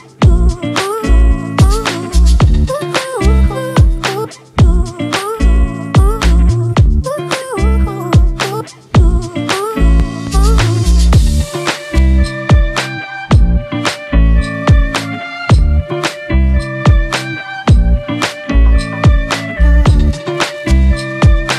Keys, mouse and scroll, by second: 0.7 double click, 9.7 alt+click, 16.4 double click, 19.1-20.0 typing, 20.3 double click.